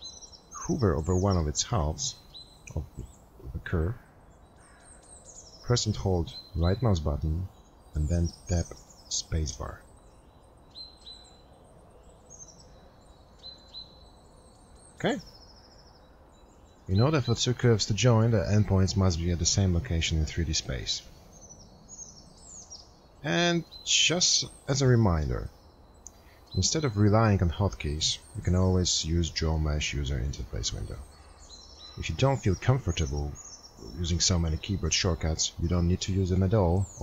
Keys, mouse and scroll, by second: 11.0 right click, 11.0 space.